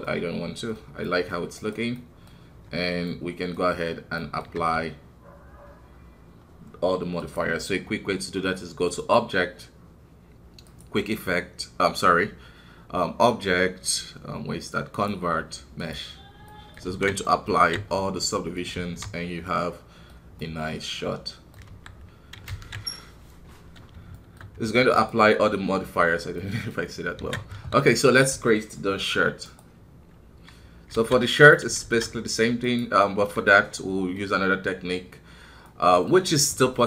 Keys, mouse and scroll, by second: 0.0 scroll down 1, 0.2-1.5 middle drag, 1.5 right click, 2.0-4.5 middle drag, 4.5 q, 7.2-12.0 drag, 16.4 middle click, 16.8 alt+w, 17.2 middle click, 17.5 alt+a, 17.8 scroll up 1, 18.3 middle click, 18.8 alt+w, 19.1 scroll down 1, 19.4-21.6 middle drag, 21.6 KP_1, 23.0 ctrl+s, 23.8 scroll down 1, 24.1 shift+middle click, 24.9-26.3 right drag, 26.3 middle click, 26.7 scroll up 2, 27.1 alt+a, 27.5 KP_1, 27.8-28.4 scroll down 2, 28.4 shift+middle click, 29.4 right click, 30.0-30.9 scroll up 2, 30.9 alt+a, 31.3 click, 31.8 shift+a, 33.7-36.8 middle drag.